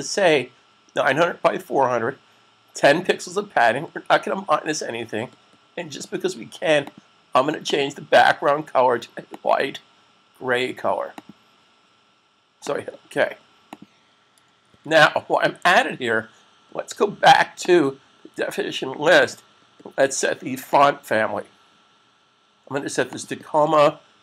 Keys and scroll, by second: 14.6 super+s.